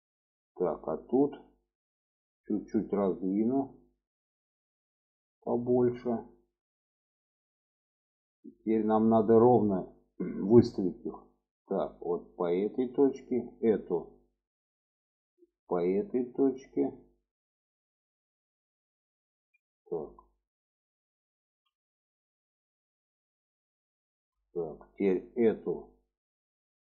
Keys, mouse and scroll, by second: 0.1 shift+middle click, 1.5 shift+middle click, 2.4 click, 3.0-5.0 drag, 6.3-6.6 shift+middle drag, 8.0 click, 11.1-12.5 ctrl+drag, 14.4-18.2 ctrl+drag, 19.1 ctrl+z, 20.6 alt+z, 22.3-23.9 ctrl+drag, 24.3 shift+middle drag, 25.4 click, 26.2-26.9 ctrl+drag.